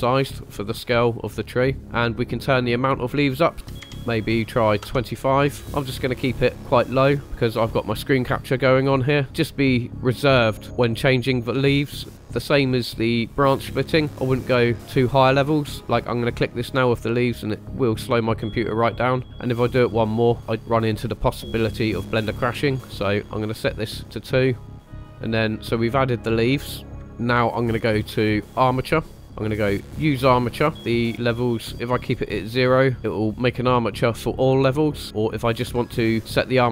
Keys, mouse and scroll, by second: 0.4-0.7 middle drag, 1.8 scroll up 1, 2.9-4.9 drag, 5.6-6.5 middle drag, 11.9-13.4 drag, 16.7-18.5 drag, 20.1 middle click, 23.0 click, 24.6-25.3 drag, 26.9 KP_1, 27.0-29.2 drag, 30.4 click.